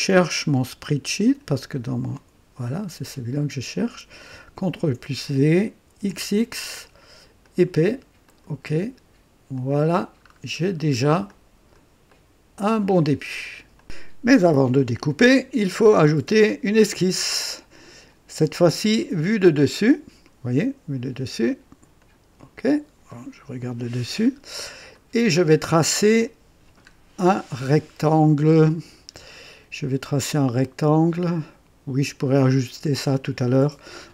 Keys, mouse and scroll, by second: 1.1 click, 2.6 click, 4.6 ctrl+v, 5.9 x, 6.0 x, 7.4 click, 8.2 click, 9.5 click, 10.2-11.0 scroll down 2, 11.3-11.9 drag, 12.1 right click, 13.7 ctrl+v, 13.7 click, 16.7 click, 18.9 click, 21.9 click, 24.1-24.7 scroll up 2, 24.9-25.6 right drag, 25.8 scroll up 2.